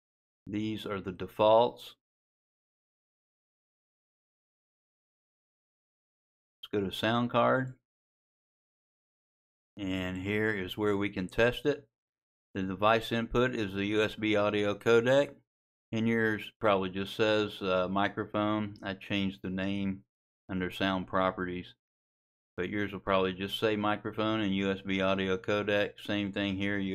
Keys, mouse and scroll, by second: 3.5 click, 25.3 click.